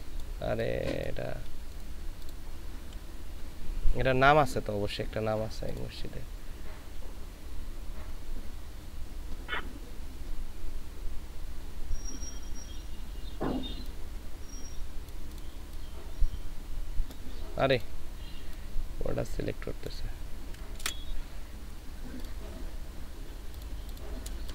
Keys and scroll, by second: 20.8 ctrl+c, 24.4 space.